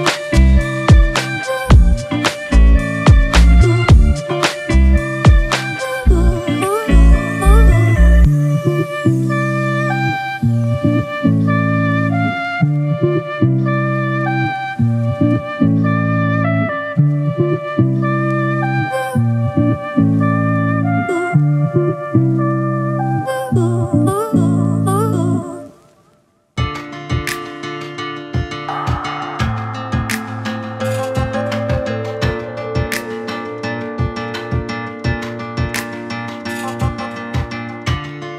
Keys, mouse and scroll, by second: 0.3 click, 0.8 scroll down 2, 1.6 click, 2.2 click, 3.3 click, 4.1 click, 6.7-7.5 scroll down 2, 10.0 click, 10.3-10.6 scroll down 1, 10.6 click, 12.7-13.3 scroll down 1, 14.2 click, 15.0 click, 15.9 click, 18.1 shift+d, 19.1 click, 20.5-21.6 drag, 23.4 click, 24.0-24.5 scroll up 1, 24.5 click, 26.3-26.6 scroll up 1, 26.6 click, 28.6 click, 30.3 click, 30.8 click, 31.4 click, 32.3 scroll down 1, 33.3-35.5 drag.